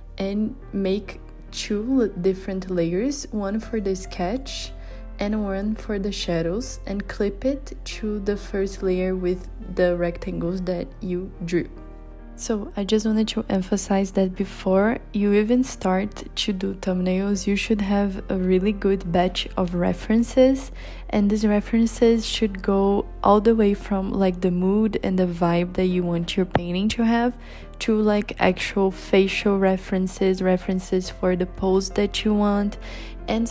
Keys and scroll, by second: 7.4 b.